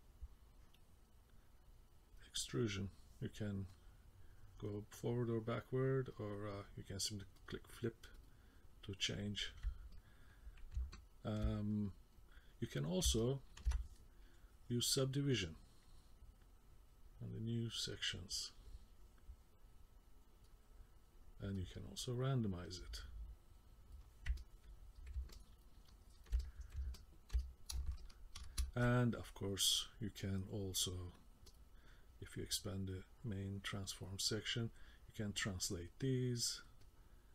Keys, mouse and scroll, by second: 3.7 click, 7.4 click, 8.2 click, 10.0 middle click, 10.9 ctrl+middle click, 11.7 middle click, 13.2 ctrl+middle click, 15.3 click, 16.6 click, 19.5 click, 21.6 click, 24.4 middle click, 25.4 ctrl+middle click, 25.9 middle click, 26.4 middle click, 26.9 ctrl+middle click, 27.4 middle click, 28.0 shift+middle click, 31.5 click, 32.9 click, 34.9 click, 36.8 click.